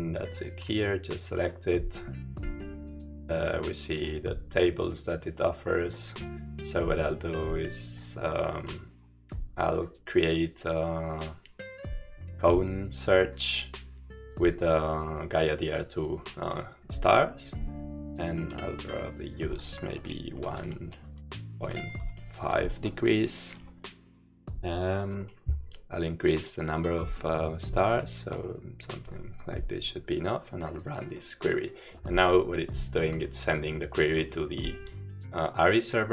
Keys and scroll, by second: 20.6 1, 21.1 Right, 21.5 Delete, 21.9 Delete, 23.5 5, 28.3 typing.